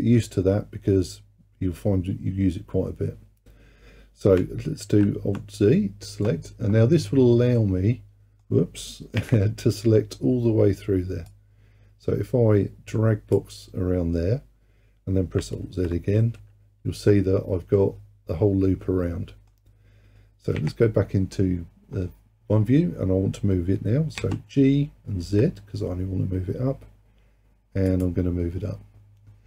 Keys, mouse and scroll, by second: 4.9 alt+z, 7.6-9.2 middle drag, 9.2 KP_1, 11.3 click, 15.7 alt+z, 16.3-19.3 middle drag, 20.6 KP_1, 22.0-24.2 scroll up 2, 24.2 g.